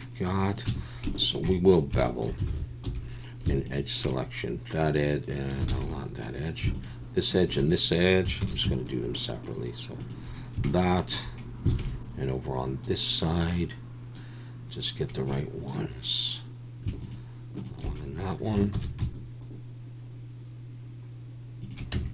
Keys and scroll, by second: 0.7 Tab, 2.5 alt+a, 2.8 2, 5.7 alt+a, 8.4 ctrl+b, 11.7 alt+a, 18.7 ctrl+b, 21.9 Tab.